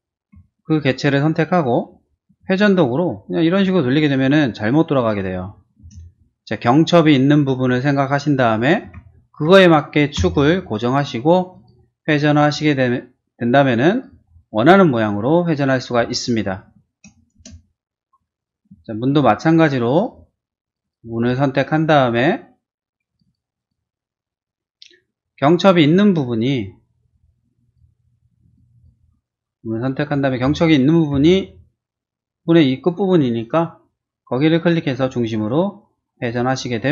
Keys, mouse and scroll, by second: 0.5 shift+middle click, 1.0 shift+middle click, 2.3 q, 3.5 click, 3.9 click, 5.8 space, 6.2 middle click, 7.1 scroll up 1, 8.8 q, 10.3 Up, 11.5 click, 12.1 click, 13.9 click, 14.2 scroll down 1, 14.6-15.6 middle drag, 15.9-16.3 scroll down 2, 16.6 shift+middle click, 17.3 shift+space, 17.6 middle click, 18.1 scroll down 1, 18.4 click, 18.8 middle click, 19.5 scroll up 1, 19.9 shift+click, 20.4 scroll down 1, 20.6 click, 20.8 click, 21.3 click, 23.1 click, 23.2 click, 23.6 click, 27.0 click, 27.7 click, 28.4 click, 28.7 click, 30.0 q, 30.3 middle click, 31.1 Up, 33.3 click, 34.5 click, 36.4 click, 36.8 middle click.